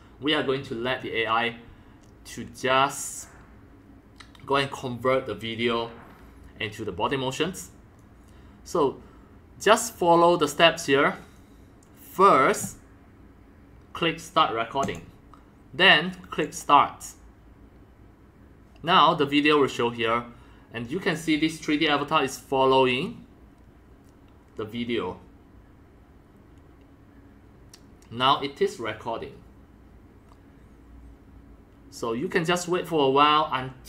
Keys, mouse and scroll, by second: 8.0 click, 8.7-12.1 drag, 13.9 click, 14.8 click, 16.4 click, 18.7-21.7 drag, 30.0 middle click.